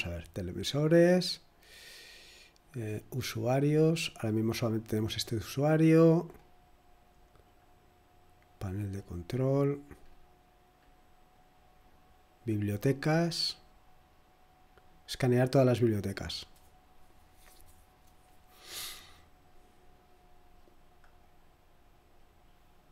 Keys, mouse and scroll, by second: 0.0 click, 3.2 click, 6.3-7.4 scroll up 2, 7.4 click, 8.6-11.7 scroll down 4, 11.7-12.7 scroll down 1, 12.7 click, 15.0 click, 21.2 click.